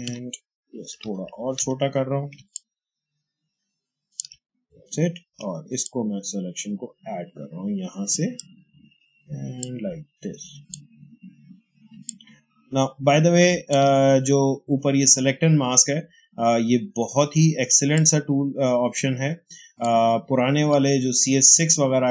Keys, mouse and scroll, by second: 0.7-1.6 typing, 2.4-5.7 alt+drag, 5.7-12.1 drag, 12.1-16.1 alt+drag, 17.3 alt+click, 17.8-22.1 drag.